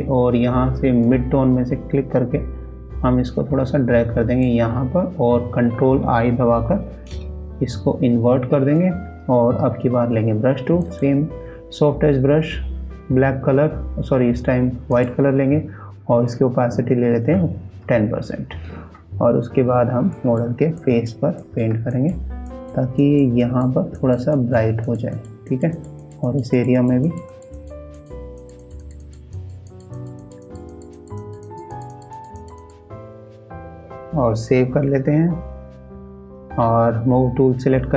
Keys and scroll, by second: 6.6 ctrl+i, 34.0 ctrl+s.